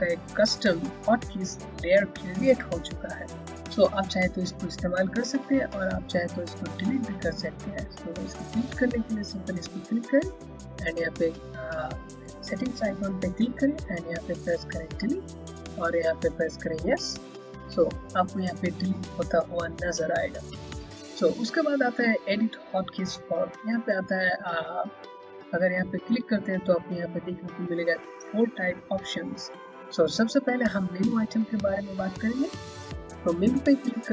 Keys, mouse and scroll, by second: 9.7 click, 13.2 click, 20.7 click, 24.8 click, 32.2 click.